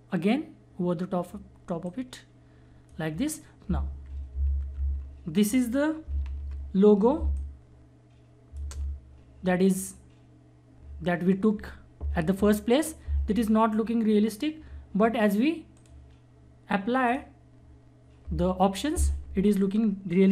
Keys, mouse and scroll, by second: 4.3 Down, 4.7 Up, 6.2 ctrl+=, 7.1 space, 7.3 click, 7.6 space, 15.7 click, 15.8 click.